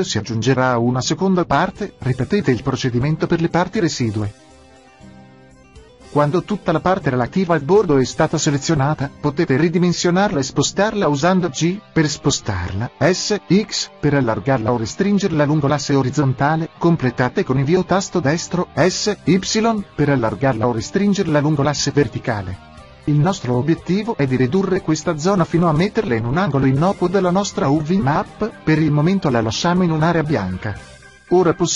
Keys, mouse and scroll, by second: 0.4 shift+l, 2.1 shift+l, 7.1 s, 12.1-14.4 drag, 12.9 g, 16.4-17.5 drag.